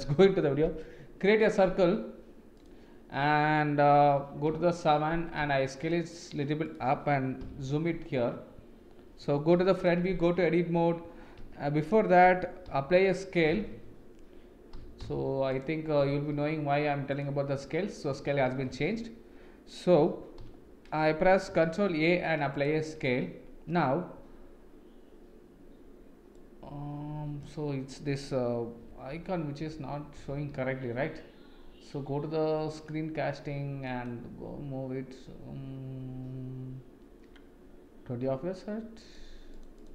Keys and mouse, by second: 4.5 KP_7, 5.5 s, 9.5 KP_1, 10.1 Tab, 11.4 Tab, 12.7 m, 14.7 b, 16.0 n, 18.7 Escape, 20.4 n, 21.7 ctrl+a, 26.6 click, 28.8 n, 29.6 n, 30.2 n.